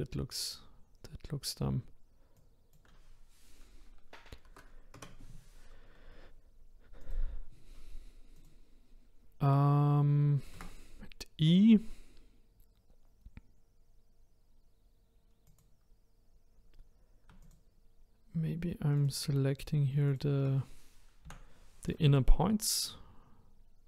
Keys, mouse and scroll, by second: 2.4-5.4 drag, 7.0 click, 8.4 click, 10.5 Tab, 15.5 click, 17.4 ctrl+click, 19.0 ctrl+click, 19.6 ctrl+click, 20.1 ctrl+click, 21.2 Delete.